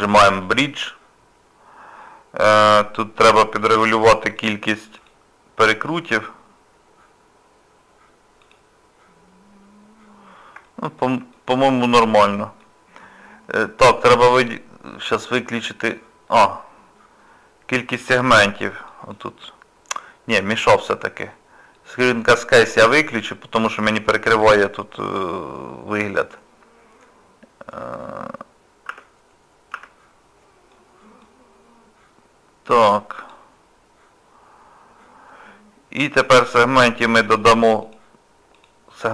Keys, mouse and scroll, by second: 0.5 click, 3.8 click, 4.4 click, 10.7 shift+middle click, 11.3 middle click, 18.9 click, 22.0 click.